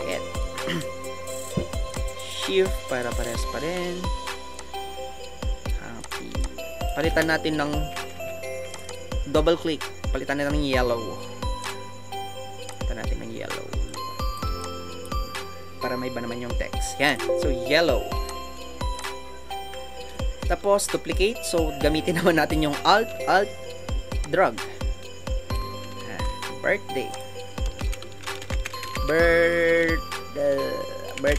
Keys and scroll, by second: 7.8 shift+Up, 19.4 Down, 19.7 Down.